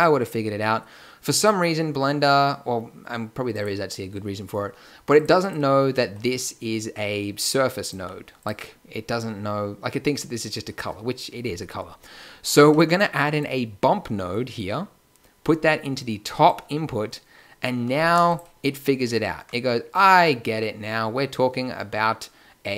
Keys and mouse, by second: 5.0-9.4 drag, 7.9 g, 13.2-16.1 drag, 19.9-22.7 middle drag.